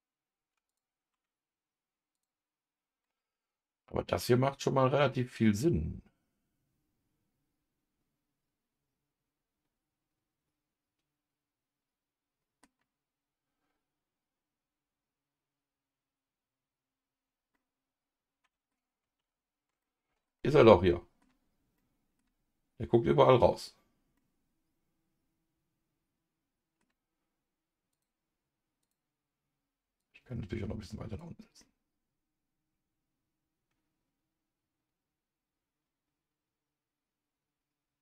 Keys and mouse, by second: 0.7 shift+click, 2.1 click, 3.0-12.6 middle drag, 17.5-18.7 middle drag, 19.2 ctrl+z, 19.8 middle click, 20.4 middle click, 21.7 middle click, 24.1-26.8 middle drag, 27.9 click, 30.0 click, 30.4-31.6 drag, 31.6-38.0 middle drag.